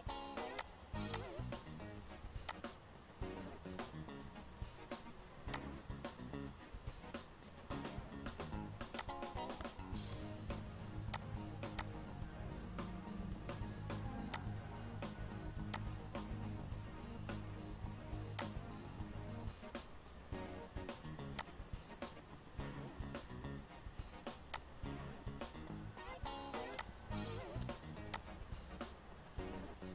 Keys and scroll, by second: 10.2 ctrl+Page_Down.